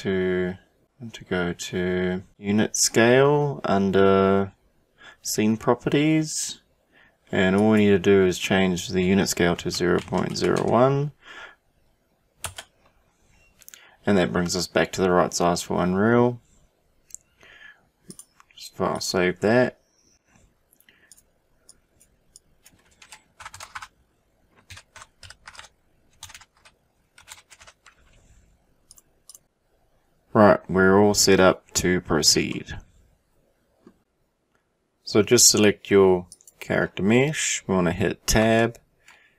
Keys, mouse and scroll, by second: 2.9-5.2 drag, 7.6-11.4 drag, 18.1-21.1 drag, 32.5-34.0 middle drag, 36.3 click, 38.4 Tab.